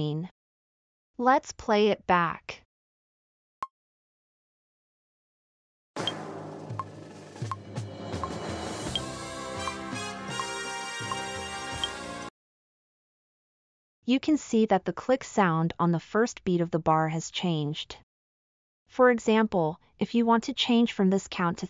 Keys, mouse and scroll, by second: 3.5 click, 3.5 right click, 12.1-15.7 drag, 12.1-15.7 right drag.